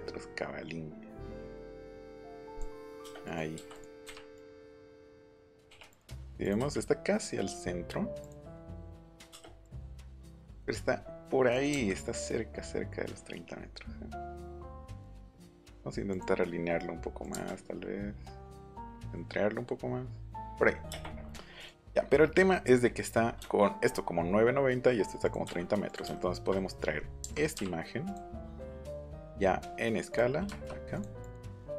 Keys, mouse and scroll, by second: 2.4 click, 3.2 click, 3.5 m, 3.7 click, 4.3 click, 5.6 l, 5.9 click, 6.4 click, 8.2 click, 9.1 click, 9.6 click, 11.7 Right, 16.1 click, 17.2 click, 20.4 click, 21.6 click, 27.2 Right, 27.5 Up, 28.0 click, 28.8 click, 30.1 click, 30.9 click, 31.2 click.